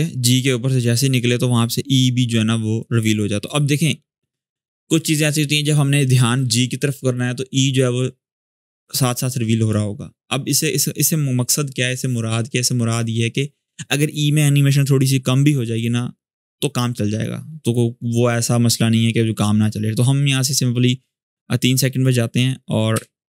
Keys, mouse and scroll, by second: 3.1-5.9 shift+drag, 21.0-22.0 drag, 22.7 s.